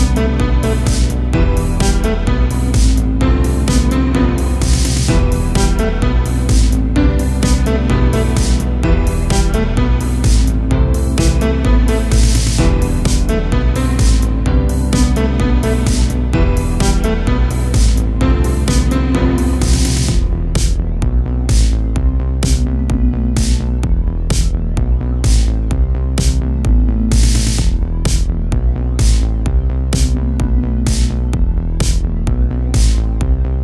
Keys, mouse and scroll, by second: 0.2 3, 0.3 click, 1.8 shift+d, 2.9 e, 5.8 a, 6.0 Tab, 6.2 scroll down 1, 6.5 a, 6.7 a, 6.8 scroll down 3, 7.1-8.1 middle drag, 8.1 click, 8.7 KP_1, 9.1 Tab, 9.4-10.0 scroll up 4, 10.0 a, 11.8 Tab, 12.0-12.6 scroll down 6, 12.6 a, 12.8 a, 13.1-14.4 middle drag, 14.4 click, 15.0 KP_7, 16.7-17.5 scroll up 3, 17.5 scroll up 1, 17.7 s, 19.0 KP_1, 20.2 g, 22.7-23.6 middle drag, 23.6-24.0 scroll up 2, 24.0 KP_7, 25.0 z, 25.2-25.7 scroll up 1, 25.7 shift+middle click, 26.0-26.6 scroll up 1, 26.6 g, 27.5 a, 27.8 a, 27.8-28.2 scroll down 4, 28.2-28.8 middle drag, 29.1 a, 29.3 a, 29.8-31.5 middle drag, 31.5 z, 32.0-33.6 shift+middle drag.